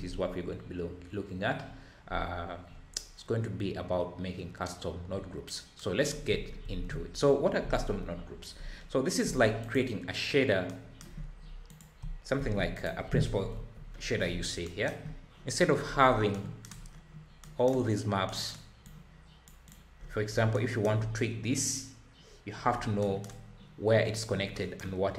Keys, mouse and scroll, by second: 5.0-5.4 scroll down 4, 6.2-6.7 scroll down 3, 6.7 ctrl+s, 9.6 click, 11.2 scroll up 4, 11.7 click, 12.3 shift+d, 13.5 KP_Decimal, 13.9-14.6 scroll up 10, 15.0-15.3 scroll up 5, 15.3-16.3 scroll down 19, 16.7 scroll down 5, 16.9-17.4 scroll up 1, 18.8 click, 19.6 click, 20.0-20.5 scroll up 10, 21.0-21.4 scroll up 4, 22.7 scroll down 4, 23.4-24.0 scroll down 2.